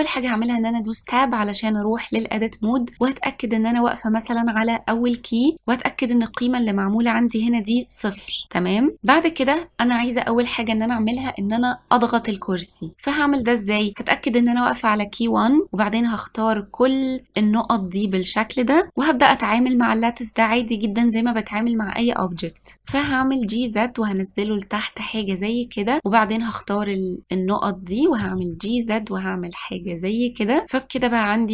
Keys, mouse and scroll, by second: 1.1 Tab, 3.1 click, 13.5 middle click, 14.2 scroll down 1, 15.8 click, 23.0 g, 26.4 click, 28.3 g.